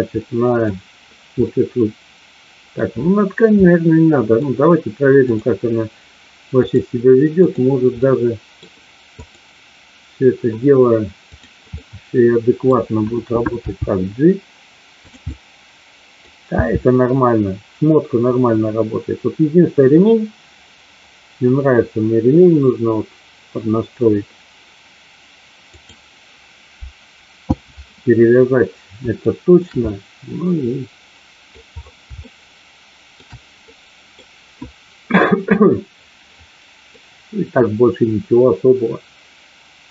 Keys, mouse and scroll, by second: 0.1 middle click, 1.6-2.8 middle drag, 3.7-4.3 middle drag, 5.2 click, 6.6 click, 7.9 middle click, 9.1 click, 11.2 click, 11.7-12.6 middle drag, 13.6 g, 15.2-16.1 middle drag, 29.2 shift+middle drag, 29.8-31.4 middle drag, 32.2-33.2 shift+middle drag, 33.6-34.2 middle drag, 36.8-39.9 middle drag.